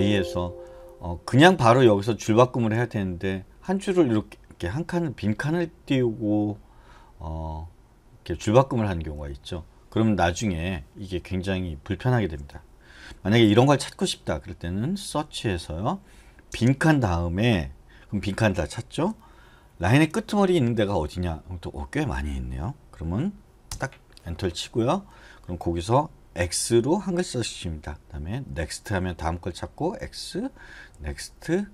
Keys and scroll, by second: 3.6 space, 9.1 Escape, 15.1 /, 16.5 space, 19.7 shift+4, 23.7 Return, 26.4 x, 28.5 typing, 29.7-30.9 typing.